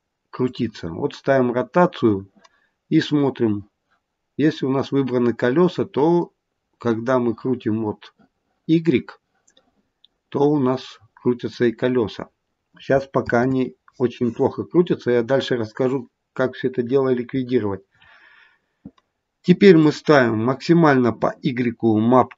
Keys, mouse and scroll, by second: 0.3 click, 0.3-1.0 scroll down 3, 1.2-1.5 scroll down 2, 6.1 click, 13.2 ctrl+z, 19.7 click.